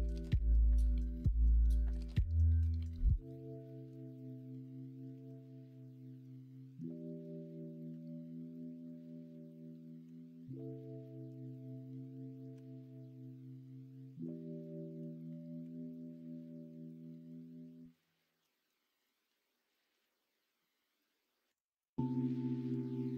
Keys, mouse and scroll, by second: 1.9 middle click, 3.2 middle click, 5.1 ctrl+r, 6.6 ctrl+b, 10.0 l, 12.5 /, 13.0 middle click, 13.7 shift+middle click, 14.0 shift+/, 14.6 shift+middle click, 15.6 3, 16.3 middle click, 16.9 middle click, 18.4 z, 19.9 x, 21.7 middle click.